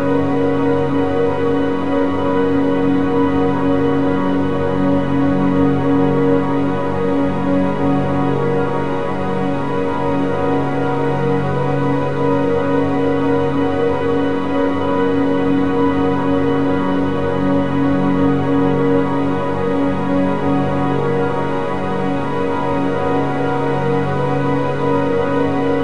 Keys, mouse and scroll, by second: 0.9-2.5 drag, 2.5-3.8 middle drag, 3.8 click, 5.6-7.9 middle drag, 7.9 click, 9.7 a, 9.8 a, 17.0 click, 18.4 shift+click, 19.5 shift+click, 20.9 Page_Down, 21.5 KP_7, 22.2-22.7 scroll down 6, 23.0-23.4 shift+middle drag, 23.4 scroll up 2, 23.8 g.